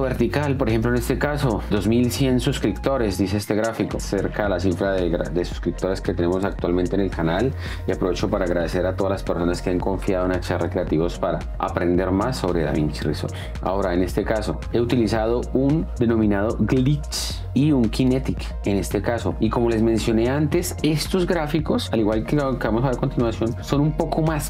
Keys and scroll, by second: 6.0 space, 13.5 space, 23.6 space.